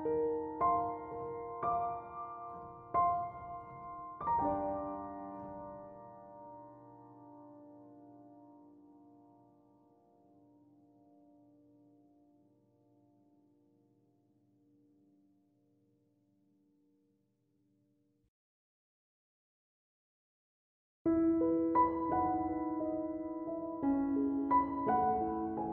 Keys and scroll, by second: 14.3 typing.